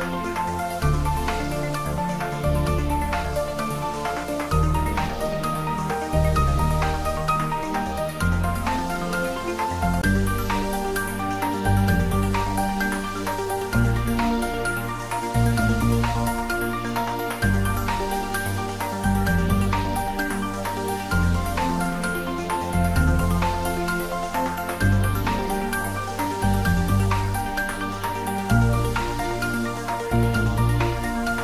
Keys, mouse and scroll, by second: 1.7 click, 3.7-4.1 scroll up 1, 4.9-7.9 drag, 19.7 click, 22.3-22.7 typing, 23.8 click, 26.4 click, 30.4 click.